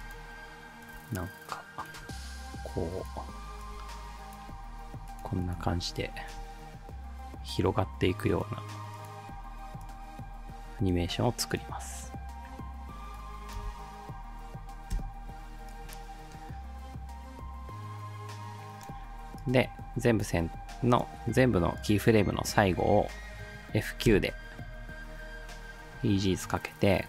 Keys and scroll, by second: 13.6 space, 15.0 space, 24.1 F9.